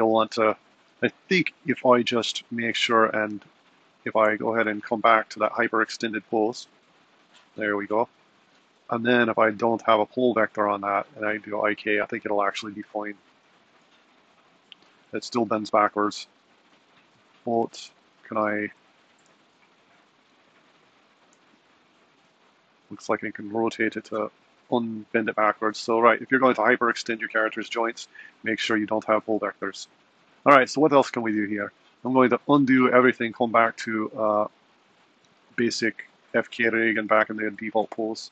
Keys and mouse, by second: 2.1 super+z, 2.6 super+z, 4.1 super+z, 4.9 super+z, 5.3 super+z, 6.6 super+z, 7.6 super+z, 8.8 click, 10.1-12.1 drag, 13.5 click, 13.9 g, 17.1 click, 17.7 r, 18.9 click, 19.3 g, 21.0 r, 23.1-25.0 middle drag, 24.0 r, 29.6 super+z, 30.0 super+z, 30.5 super+z, 30.8 super+z, 31.8 super+z, 32.1 super+z, 33.4 super+z, 34.8 super+z, 36.2 super+z, 36.5 super+z, 37.3 super+z, 37.6 super+z.